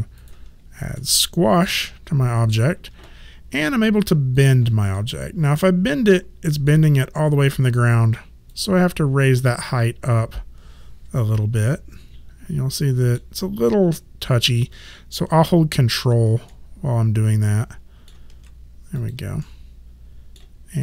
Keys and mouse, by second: 0.2 click, 1.0 middle click, 4.4 click, 5.0 middle click, 8.5 click, 9.3 middle click, 16.5 ctrl+middle click, 19.0 click, 19.4 middle click.